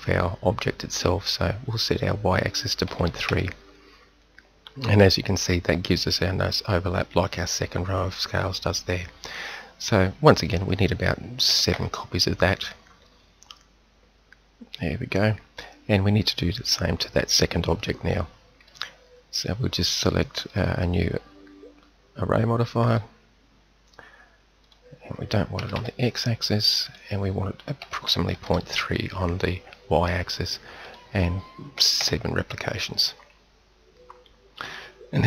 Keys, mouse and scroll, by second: 1.7-3.7 drag, 10.5-13.4 middle drag, 14.7-17.0 middle drag, 17.0-18.1 drag, 18.1-28.9 middle drag, 30.9-33.7 middle drag.